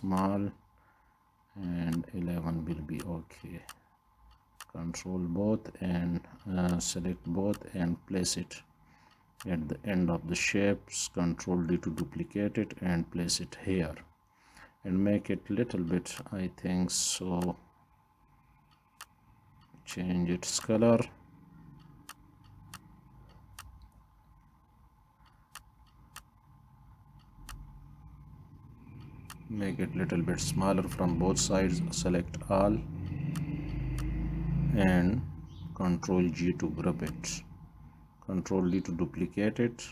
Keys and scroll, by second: 11.2 ctrl+d, 35.9 ctrl+d.